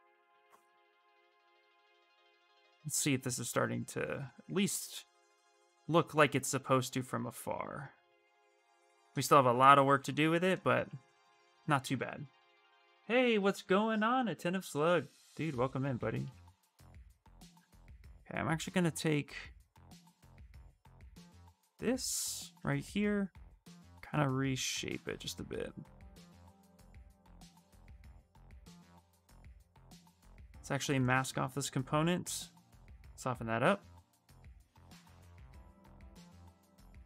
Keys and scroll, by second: 15.3-16.7 typing, 21.7 s, 32.6 w.